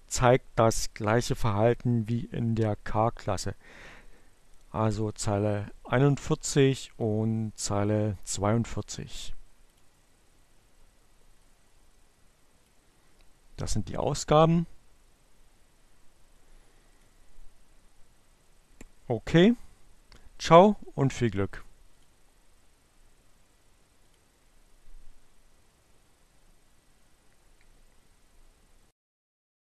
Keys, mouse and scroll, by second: 4.5 click, 6.9 click, 10.8-12.9 drag, 16.9 click, 20.3-22.2 drag, 23.3 click.